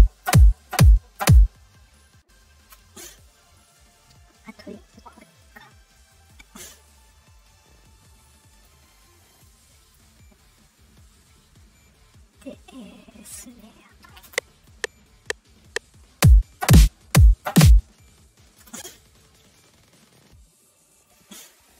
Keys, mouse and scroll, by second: 2.6 space, 5.2 shift+click, 5.8 right click, 8.2 click, 9.4 click, 13.4 click, 14.2 space, 18.6 space, 21.0 click.